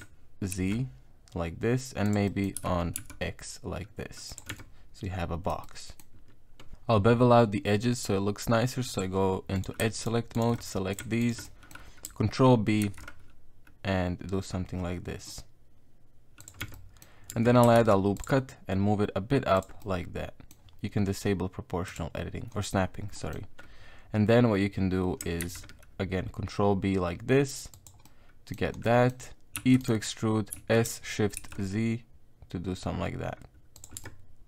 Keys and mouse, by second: 2.3 middle click, 2.6 s, 4.5 Tab, 4.6 middle click, 5.2 middle click, 5.6 middle click, 8.9 click, 9.6 right click, 10.0 shift+right click, 10.4 shift+right click, 10.6 middle click, 11.2 shift+right click, 11.4 middle click, 12.8 ctrl+b, 16.6 Tab, 16.7 middle click, 17.3 Tab, 17.8 ctrl+r, 19.8 middle click, 20.5 middle click, 21.9 click, 23.1 middle click, 25.4 ctrl+b, 28.0 middle click, 28.8 middle click, 29.6 e, 30.5 s, 34.0 Tab, 34.0 middle click.